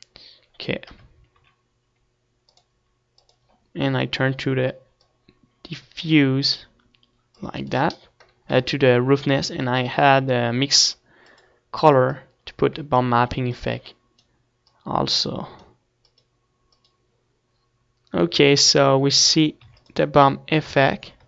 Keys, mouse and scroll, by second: 1.6 middle click, 2.2 KP_0, 2.3 middle click, 2.7 z, 3.9-5.3 drag, 5.3-6.5 middle drag, 6.5-8.1 drag, 8.1 middle click, 8.7-10.4 drag, 10.0 shift+a, 13.7-19.1 drag, 20.2-21.2 middle drag, 21.0 ctrl+s.